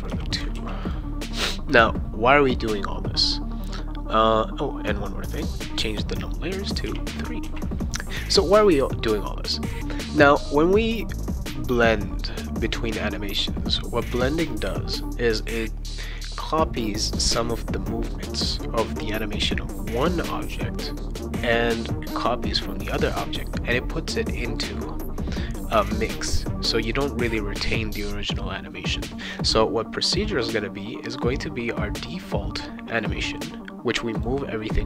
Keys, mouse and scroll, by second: 0.5 ctrl+s, 0.8 click, 4.8 click, 6.8 3, 7.4 ctrl+s, 7.8 click, 30.5-32.1 drag, 34.1 click.